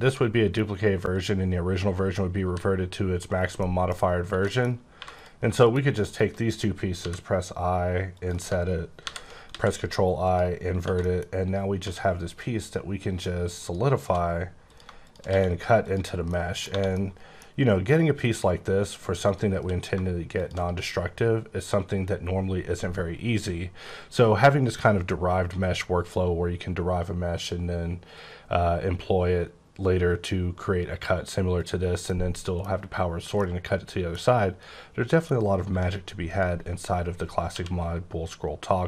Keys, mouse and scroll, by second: 1.1 right click, 2.4 g, 3.2 right click, 3.5 middle click, 4.0 scroll up 3, 4.2 Tab, 4.4 middle click, 4.9 3, 5.1 click, 5.4 scroll down 1, 5.5 middle click, 6.0 shift+click, 6.4 scroll up 2, 8.1 click, 9.4 x, 10.2 click, 10.6 scroll down 2, 10.8 Tab, 10.9 middle click, 11.8 q, 13.6 click, 14.0 2, 14.6 click, 15.3 q, 15.8 click, 16.2 middle click, 16.7 1, 16.9 middle click, 19.2 click, 19.5 q, 20.3 shift+click, 20.8-21.1 scroll up 8, 21.3-21.7 scroll down 9, 21.9-23.0 scroll up 17, 23.2-23.5 scroll down 10, 24.0-24.7 scroll up 8, 25.6-26.0 scroll down 6, 26.1-26.5 scroll up 7, 28.3-28.8 scroll down 6, 28.8-30.3 scroll up 6, 30.3-31.5 scroll up 2, 31.5 click, 32.0 middle click, 33.3 middle click, 35.7 1, 36.2 click, 37.4 q.